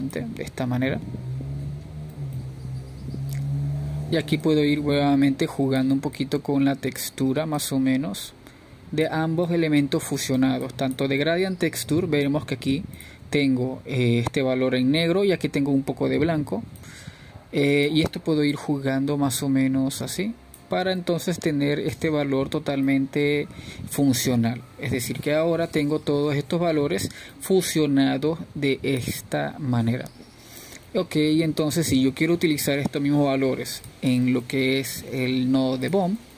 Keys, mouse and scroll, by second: 2.1-3.5 drag, 6.4-7.9 middle drag, 7.9-12.8 drag, 12.8-13.9 middle drag, 13.9 click, 14.6-16.4 middle drag, 16.4 click, 20.1-24.3 drag, 24.3-28.9 middle drag, 28.9 scroll down 2, 29.4 scroll up 2.